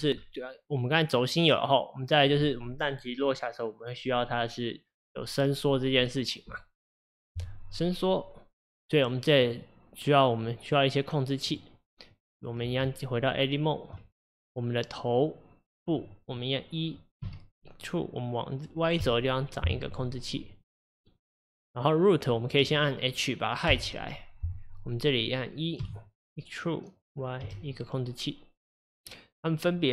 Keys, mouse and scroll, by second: 9.4 click, 11.5 click, 12.1 click, 12.9 Tab, 14.3 click, 17.2 e, 21.5 click, 23.7 h, 24.4 click, 25.8 e.